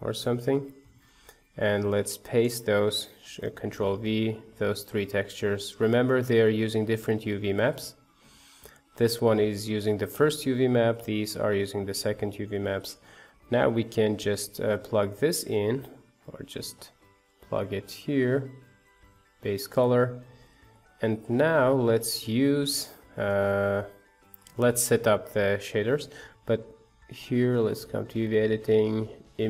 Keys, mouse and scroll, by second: 2.4-3.7 drag, 3.7 ctrl+v, 5.0 click, 6.2-9.1 drag, 10.9-15.0 drag, 16.4 ctrl+shift+click, 18.1-19.9 drag, 19.9-21.9 middle drag, 21.9 click, 26.1-27.8 middle drag.